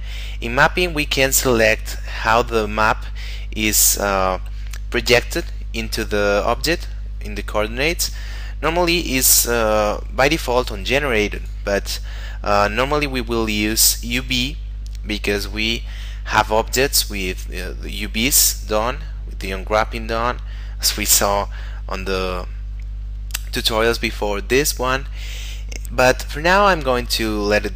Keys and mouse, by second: 0.1 middle click, 5.4 click, 8.0 click, 11.4 click.